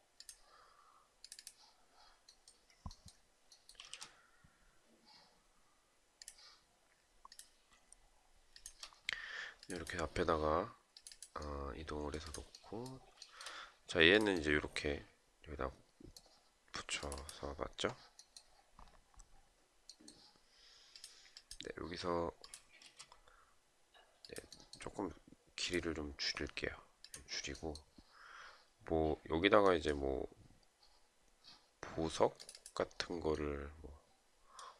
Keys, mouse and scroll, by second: 3.3 space, 7.9 shift+click, 12.7 shift+right click, 22.3 space.